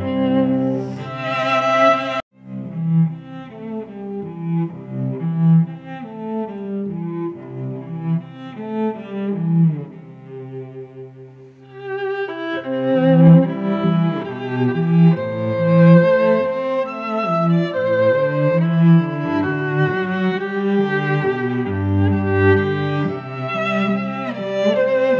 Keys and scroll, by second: 1.3 Return, 2.7 ctrl+t, 5.2 Return, 7.7 ctrl+t, 8.8 Return, 9.2 shift+Right, 9.9 shift+Up, 10.3 shift+Right, 10.5 Down, 10.9 Right, 11.2 Down, 11.5 Right, 12.6 F9, 20.5 Return.